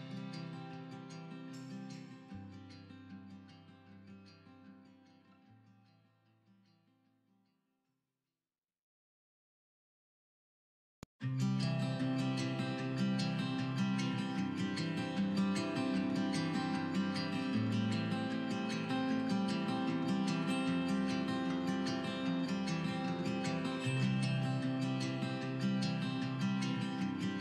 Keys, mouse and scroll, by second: 1.0 middle click, 1.4 click, 1.5 scroll down 1, 1.7 scroll up 1, 1.9 middle click, 2.0 scroll down 1, 2.2 middle click, 2.5 ctrl+r, 3.1 click, 3.2 middle click, 3.4 scroll up 1, 3.5 middle click, 3.6 click, 3.8 scroll down 1, 3.9 middle click, 4.1 scroll up 1, 4.2 middle click, 4.4 scroll down 1, 4.5 middle click, 4.8 ctrl+r, 5.3 click, 5.4-6.1 scroll down 2, 5.5 click, 5.7 middle click, 6.1 middle click, 6.3-6.9 scroll up 2, 6.5 Tab, 6.6 middle click, 7.0 shift+middle click, 7.1 scroll down 1, 7.4 scroll up 1, 7.6-7.9 middle drag, 7.9 shift+a, 8.7 scroll down 2, 8.7 middle click, 8.9-9.2 scroll up 2, 9.2 s, 10.1 click, 10.5 s, 11.8 click, 11.9 middle click, 12.0-12.3 scroll up 2, 12.3-12.8 shift+middle drag, 12.8 s, 13.8 right click, 14.2 drag, 14.7 KP_1, 14.9-15.6 scroll up 1, 15.6 s, 16.8 click, 17.1 g, 17.9 click, 18.0-19.4 middle drag, 18.1 scroll down 1, 18.5 scroll up 1, 18.8 scroll down 1, 19.2 scroll up 1, 19.4 click, 19.9 g, 21.0-23.1 shift+middle drag, 21.4 scroll up 2, 22.0 scroll down 2, 22.6 scroll up 2, 22.7 scroll down 2, 23.1-23.4 drag, 23.8 h, 23.9-25.4 middle drag, 24.1-24.4 scroll up 2, 24.4 scroll down 2, 24.9 scroll up 2, 25.0 scroll down 2, 25.4 click, 25.6-26.0 scroll down 2, 26.0-27.2 scroll up 2, 27.2 shift+click.